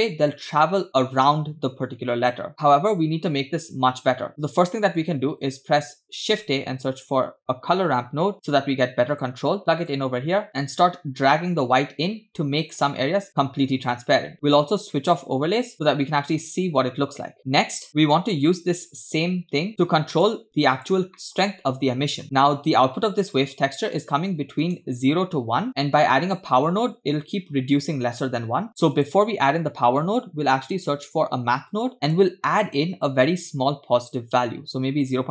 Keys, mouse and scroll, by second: 3.8-4.4 scroll down 2, 4.4-5.1 drag, 5.4 click, 6.3 shift+a, 10.5 shift+middle click, 10.5-12.8 drag, 13.3-13.9 scroll up 4, 13.9-15.1 scroll down 3, 15.2 click, 17.4 click, 17.9 scroll down 2, 18.5-20.3 drag, 20.8 click, 21.2 middle click, 21.4 scroll up 2, 22.2-22.6 scroll down 2, 22.3-22.6 scroll up 1, 23.6-24.7 drag, 28.5 shift+a, 33.3-34.2 drag, 34.6-35.3 scroll up 2.